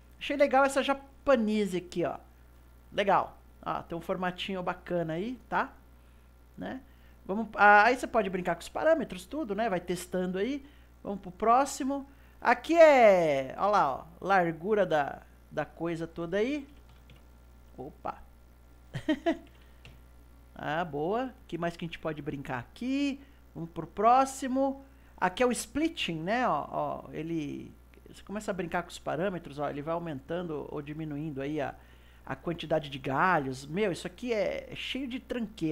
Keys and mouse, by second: 3.4-5.9 middle drag, 5.9-8.9 drag, 10.9-21.6 drag, 23.0-26.1 drag, 26.6-31.5 drag.